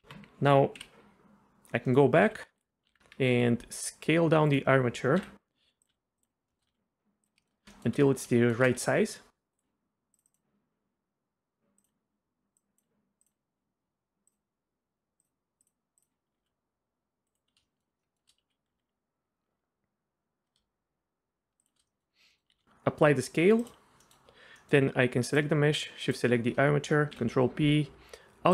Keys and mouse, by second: 0.0 Tab, 1.8 click, 1.9 middle click, 2.2 s, 3.0 alt+s, 4.5 click, 5.2 KP_1, 5.6 s, 5.9 s, 6.2 click, 6.5 shift+click, 6.7 s, 7.4 shift+click, 7.8 shift+click, 8.4 shift+middle click, 8.8 s, 10.2 click, 11.8 click, 12.6 click, 15.3 click, 15.7 click, 16.3 s, 17.7 shift+middle click, 18.1 shift+middle click, 21.9 middle click, 22.5 ctrl+a, 24.0 middle drag, 24.7 middle drag, 25.3 click, 26.1 shift+click, 27.1 ctrl+p.